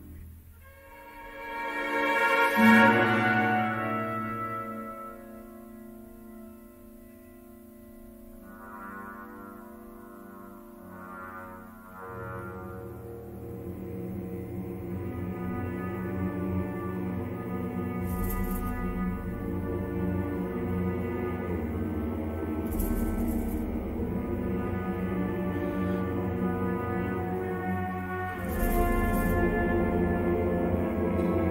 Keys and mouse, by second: 0.8 middle click, 1.8 2, 2.0 click, 2.3 g, 3.4 2, 3.9 1, 5.1 middle click, 5.6 shift+middle click, 5.9 middle click, 8.4 g, 11.0 shift+click, 14.1 shift+middle click, 14.5 middle click, 14.8 3, 15.7 click, 17.5 middle click, 22.0 ctrl+z, 22.5 middle click, 23.4 ctrl+r, 25.7 middle click, 26.0 3, 26.6 ctrl+z, 27.9 s, 29.3 middle click, 30.3 shift+middle click.